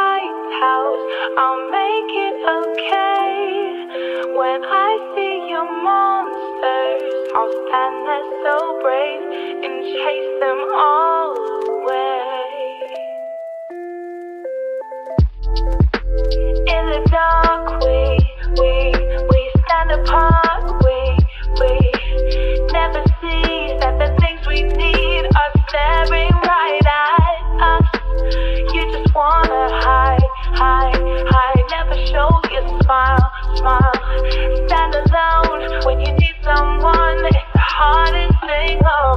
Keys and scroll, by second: 0.3 0, 0.6 Return, 30.0 ctrl+v.